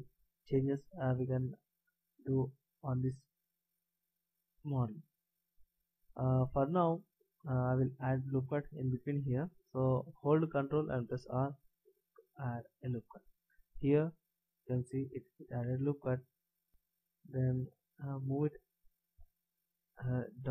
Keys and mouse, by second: 3.3-11.4 middle drag, 11.4 ctrl+r, 18.2 middle click, 18.4-20.5 drag.